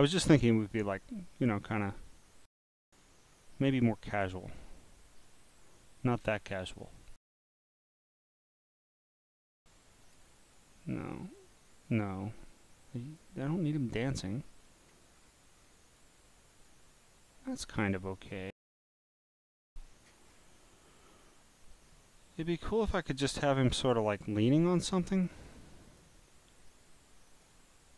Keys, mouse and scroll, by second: 1.4-2.2 scroll down 2, 3.3 scroll down 3, 4.1 click, 5.2 click, 6.4 click, 8.7 click, 9.8 click, 11.1 click, 13.0 click, 14.1 click, 15.6-16.0 scroll down 1, 16.0 click, 17.5 click, 20.3-20.7 scroll up 4, 24.1 click, 25.0 click, 25.9 click, 27.3 click.